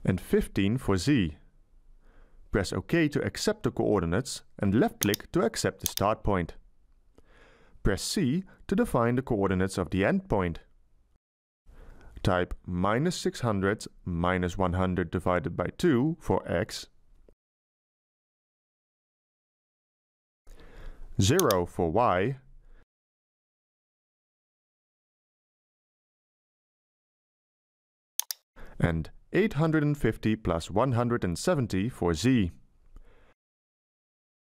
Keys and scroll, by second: 0.0 BackSpace, 1.4 1, 1.8 5, 8.5 c, 10.9 Delete, 12.9-15.2 typing, 21.9 BackSpace, 24.3 0, 29.1 BackSpace, 31.4 8, 32.1 5, 32.5 0.